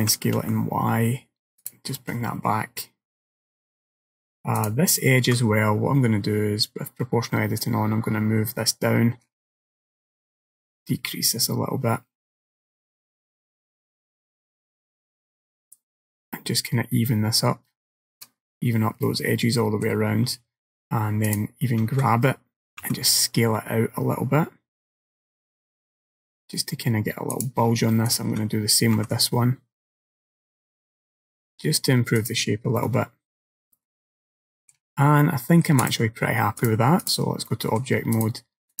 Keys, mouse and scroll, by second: 0.1 s, 2.0 middle click, 4.6 alt+click, 7.6 click, 19.1 middle click, 21.3 alt+click, 22.9 s, 28.1 alt+click, 29.0 s, 32.9 middle click, 35.0-35.9 scroll down 3, 35.3 middle click, 35.9 click, 36.7 click, 37.5 middle click, 38.2 right click.